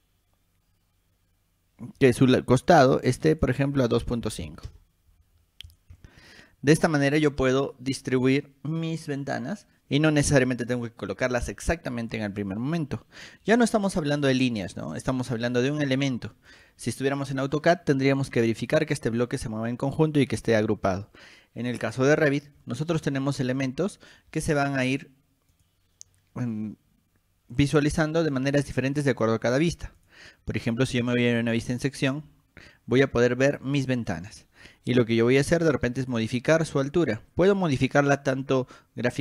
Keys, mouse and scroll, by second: 3.5 click, 5.5 scroll down 2, 5.8 click, 6.1-6.5 scroll up 2, 12.7 middle click, 12.7 scroll up 2, 13.6-14.0 scroll up 2, 14.5-14.8 drag, 15.5 click, 16.7 click, 18.0 scroll up 2, 20.9-21.4 scroll down 4, 22.4 scroll down 2, 22.8 middle click, 23.2 click, 25.7 click, 27.7 click, 29.3 click, 30.1 click, 31.7 click, 31.9 click, 36.1 click, 37.4 scroll up 2, 38.9 scroll up 2.